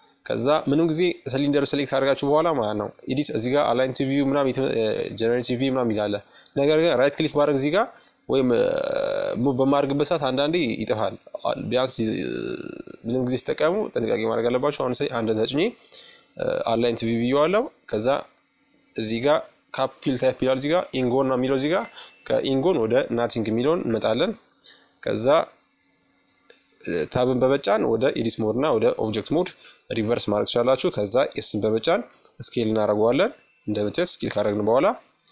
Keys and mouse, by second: 1.6-2.8 drag, 2.9-4.8 drag, 4.8 right click, 5.8-7.7 middle drag, 7.7-11.9 middle drag, 11.9-15.8 drag, 12.6 KP_1, 18.7-20.5 drag, 20.5 middle click, 22.8-23.8 middle drag, 23.8-25.6 drag, 24.4 Tab, 26.5 s, 32.3-34.1 middle drag.